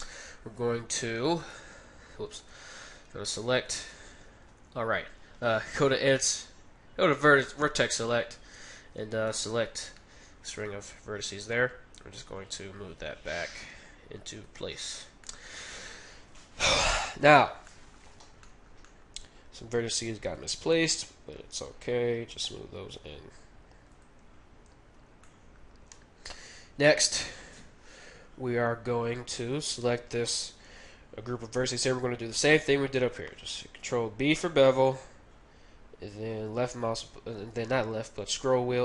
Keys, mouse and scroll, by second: 1.4-3.1 right drag, 2.5 ctrl+z, 3.6-5.4 right drag, 4.5 ctrl+z, 5.6 ctrl+Tab, 9.1-10.8 right drag, 9.6-11.9 middle drag, 11.9 scroll up 1, 12.2-14.0 drag, 12.2 middle click, 14.8-17.1 middle drag, 14.8-15.4 scroll up 1, 17.6-20.5 middle drag, 20.0-22.0 right drag, 21.5 g, 23.4 g, 24.6-28.5 middle drag, 27.1 scroll down 1, 28.5-29.5 scroll up 1, 29.5-33.0 right drag, 33.8 ctrl+b.